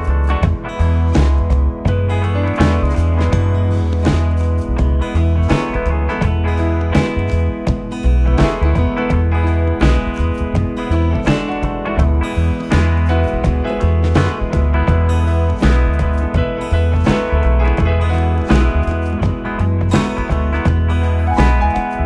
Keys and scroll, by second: 1.3 ], 6.0 4, 9.4 ], 10.5 ], 12.6 4, 19.8 3.